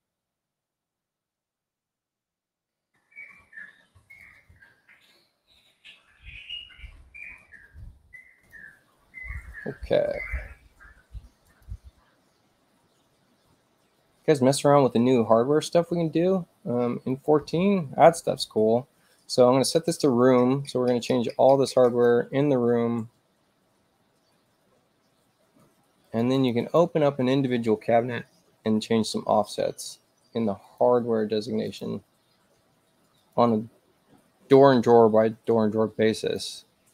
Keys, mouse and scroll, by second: 0.0-1.9 typing, 3.6-4.8 typing, 7.2 click, 8.3 click, 11.5 click, 17.1 click, 19.7 click, 21.9 click, 25.4 space, 26.1 click, 26.3 click, 26.6 click, 30.6 click, 31.7 click, 33.2 click, 36.2 click.